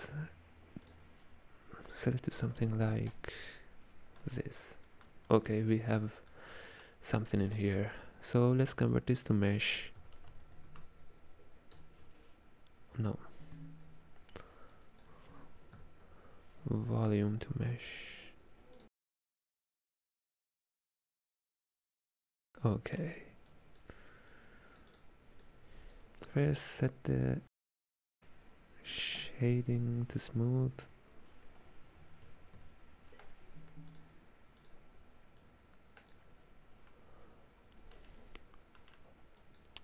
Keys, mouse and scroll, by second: 0.9-2.7 drag, 2.7 KP_0, 4.7-8.0 ctrl+middle drag, 8.0 click, 9.0 click, 14.8 click, 20.0 click, 21.9-23.5 middle drag, 23.5 click, 24.4 click, 24.9 click, 26.5 click, 27.3 click, 35.5 click, 36.9-39.5 middle drag, 39.5 click.